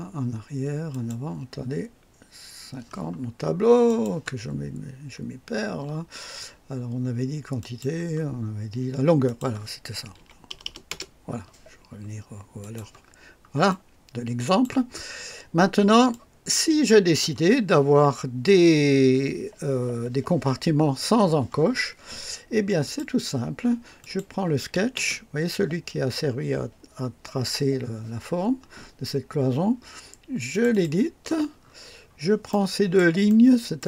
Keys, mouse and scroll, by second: 0.9 click, 3.8 click, 7.6 click, 9.2 click, 10.2 KP_1, 10.5 KP_0, 10.6 KP_0, 10.9 Return, 10.9 Return, 12.6 click, 13.1 scroll down 1, 13.7-14.8 drag, 14.9 scroll up 1, 15.5 scroll down 1, 16.1-17.4 drag, 22.8 click, 24.0 click, 24.9 space, 30.5 click, 31.6-32.3 scroll up 2, 32.5 right click, 33.3 right click.